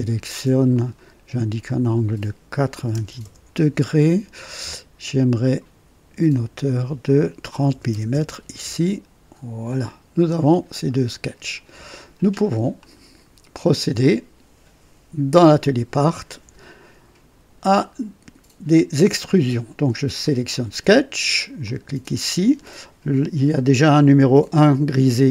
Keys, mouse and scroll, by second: 0.7 click, 1.6 click, 2.7 KP_9, 2.9 KP_0, 3.2 Return, 5.1 click, 6.3 click, 7.6-8.1 typing, 9.6 click, 10.5-10.9 scroll down 2, 12.7 click, 15.3-16.0 typing, 15.5 click, 20.2 click, 21.6 click.